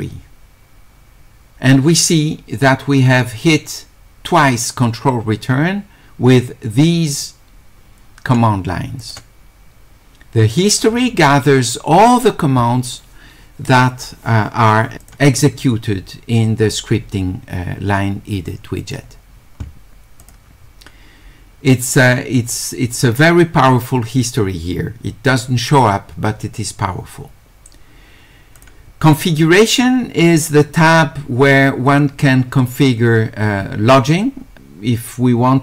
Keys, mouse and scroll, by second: 9.0 click, 15.0 click, 18.8 click, 20.2 click, 28.6 click.